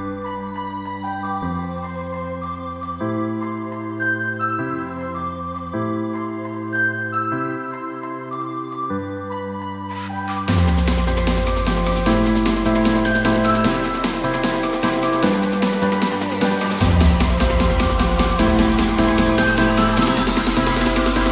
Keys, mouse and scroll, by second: 20.9 ctrl+click.